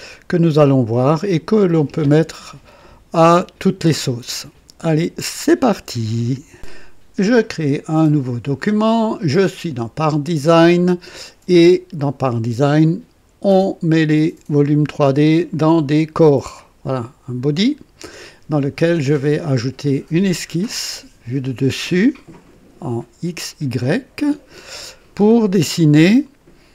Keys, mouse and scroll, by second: 6.4 right click, 8.1 click, 16.3 click, 22.0 click, 23.8 click, 26.2 click.